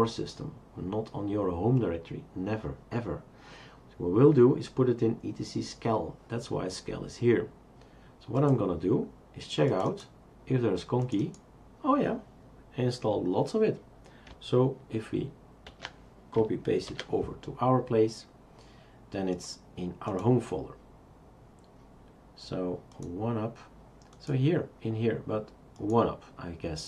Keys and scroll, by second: 15.7 ctrl+a, 16.9 ctrl+c.